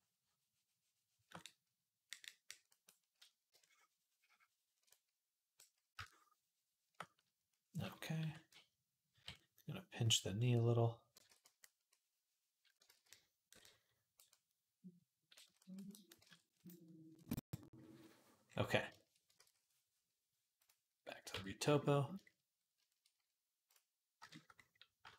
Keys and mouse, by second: 8.0 p, 8.3-9.0 ], 11.1 ctrl+z, 12.7 ctrl+z, 16.0 ctrl+Tab, 17.8-20.5 drag, 17.8-25.1 right drag, 19.7 ctrl+s, 21.2 Tab.